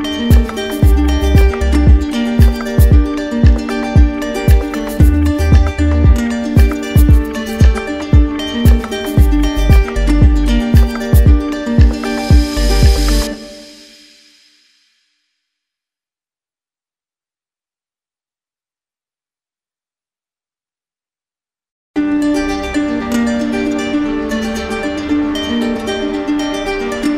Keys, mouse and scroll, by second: 0.7 click, 2.2 click, 3.0 click, 4.2 click, 5.7 right click, 7.5 click, 9.2 click, 10.0 right click, 10.6 alt+right click, 12.0 right click, 12.0 d, 13.2 shift+right click, 14.0 alt+right click, 15.0 right click, 16.2 click, 18.5 right click, 20.0 alt+right click, 21.3 alt+click, 21.9 alt+right click, 22.6 right click, 25.2 right click, 26.9 right click.